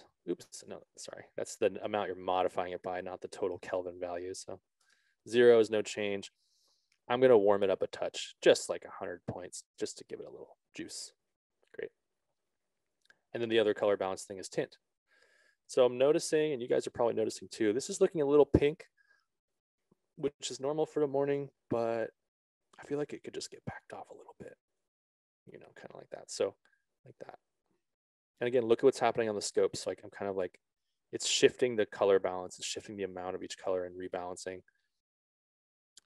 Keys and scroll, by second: 0.3 Return, 5.3 Return, 17.0 ctrl+z.